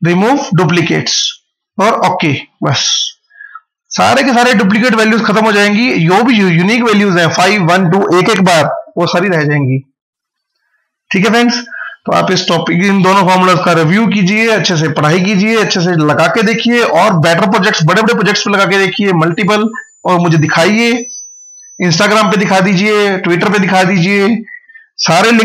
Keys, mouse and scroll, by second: 4.9 scroll up 1, 6.0 click.